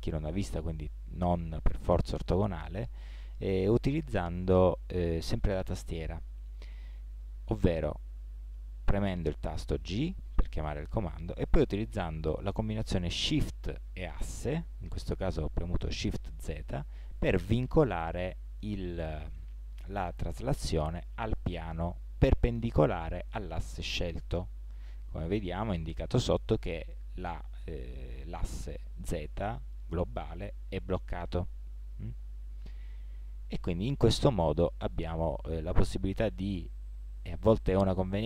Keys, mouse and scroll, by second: 9.8 g.